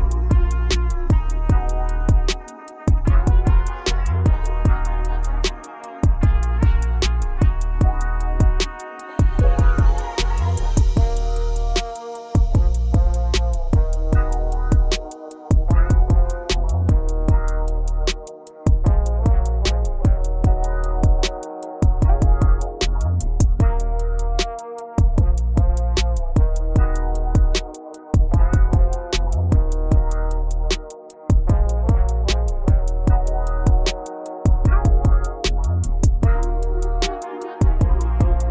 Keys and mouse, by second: 0.1 KP_2, 0.6 KP_2, 1.6 KP_8, 4.2 right click, 5.4-8.4 right drag, 11.6 x, 14.8 click, 17.1 right click, 18.7 x, 20.6 click, 24.0-25.8 typing, 27.9 KP_2, 28.3 right click, 32.2 x, 34.9 Return.